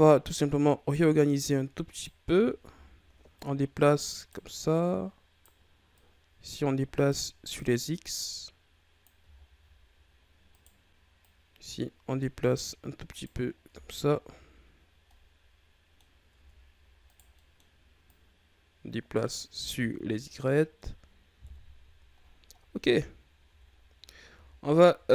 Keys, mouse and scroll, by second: 0.3 right click, 1.4 right click, 2.4-3.3 ctrl+scroll up 3, 3.3 right click, 4.7 right click, 5.9 right click, 7.4 right click, 8.2-9.2 drag, 9.2-10.5 shift+scroll up 5, 10.5 right click, 11.1-13.1 drag, 13.1 right click, 13.6 Tab, 13.8-14.7 scroll down 10, 14.7 scroll up 4, 15.0 middle click, 16.0 scroll up 4, 16.3 Tab, 17.0 right click, 17.3 middle click, 18.0-19.4 drag, 19.4 Tab, 19.8-21.4 middle drag, 21.4 KP_1, 22.2-22.5 scroll down 5, 23.0-24.4 shift+scroll up 3, 24.4-25.1 shift+scroll up 4.